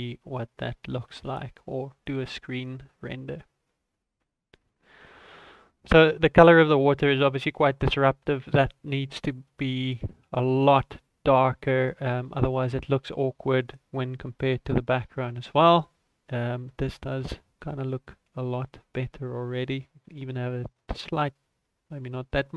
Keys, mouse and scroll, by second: 0.0 ctrl+s, 1.0 z, 7.5 right click, 8.5-9.4 scroll up 9, 9.4 middle click, 10.1 click, 15.2 right click, 17.4 click.